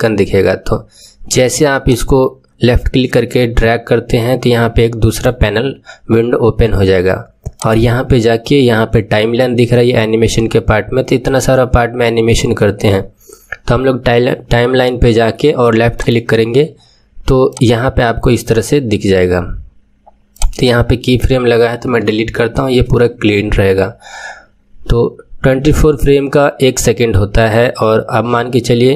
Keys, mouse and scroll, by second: 1.8-4.8 drag, 7.5-10.6 drag, 17.4-20.3 drag, 21.8 Delete.